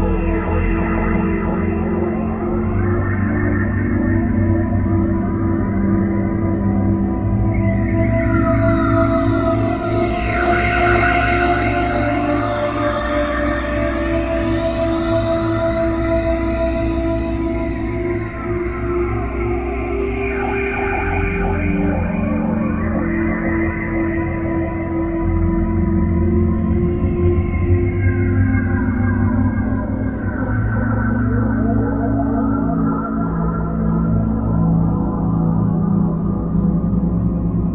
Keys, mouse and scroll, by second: 8.7 Escape, 10.6 click, 22.6 Escape, 24.3 scroll down 1, 25.0-26.0 scroll down 6, 27.0 right click, 30.9 click, 34.5 KP_7, 36.6 r.